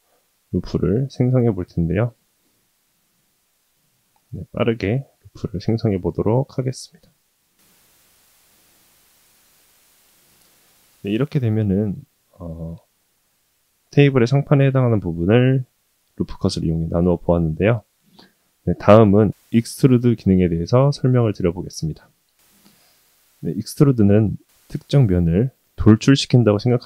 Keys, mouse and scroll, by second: 2.9 KP_7, 3.9 g, 7.0 ctrl+r, 10.3-12.8 middle drag, 13.2-14.9 middle drag, 16.2-17.2 middle drag, 17.5-19.1 middle drag, 19.7-21.3 middle drag.